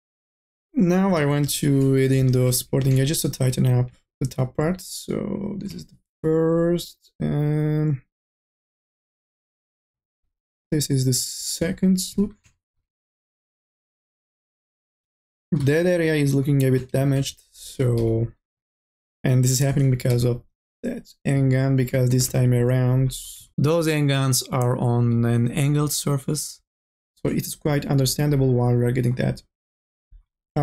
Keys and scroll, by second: 1.2-3.8 typing, 11.4 q, 17.6 1, 18.1 e, 19.4-20.3 typing.